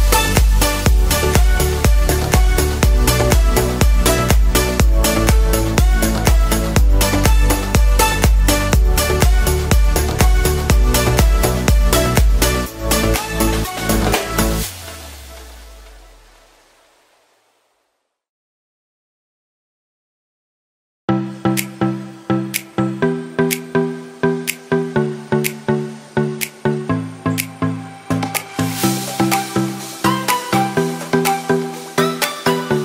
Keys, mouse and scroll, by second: 1.4 click, 3.6 click, 5.7 click.